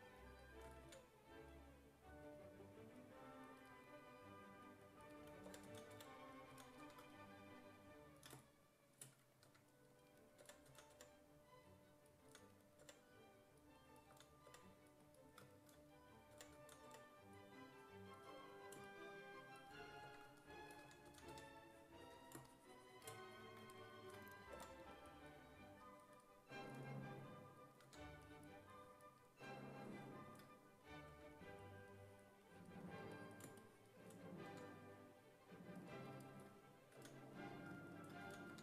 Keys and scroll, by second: 0.9 ctrl+z, 5.3-6.8 typing, 9.5-12.8 typing, 14.2 s, 14.5 5, 16.2-17.4 typing, 20.1-21.8 typing, 24.6 5, 26.7 s, 27.9 1, 31.1 1, 34.5 1, 37.0 s, 38.3 s, 38.5 1.